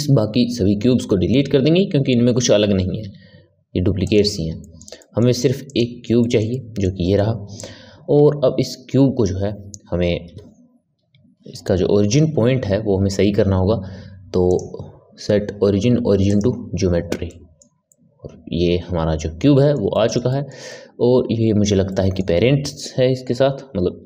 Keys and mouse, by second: 3.0 x, 4.6-5.6 ctrl+middle drag, 5.6 click, 6.2-8.1 ctrl+middle drag, 8.1 KP_1, 10.2 KP_3, 14.4-17.2 drag, 17.2-24.0 middle drag.